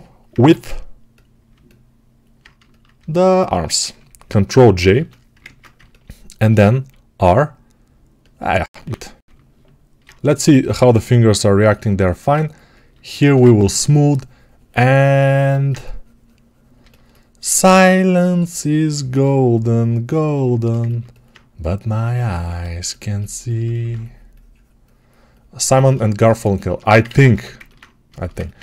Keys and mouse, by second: 0.3 ctrl+Tab, 1.4-15.2 alt+middle drag, 4.7 ctrl+j, 7.0 r, 10.0 ctrl+r, 15.2-22.4 alt+right drag, 26.5-28.4 alt+shift+drag, 27.0 ctrl+z, 28.4-28.6 right drag.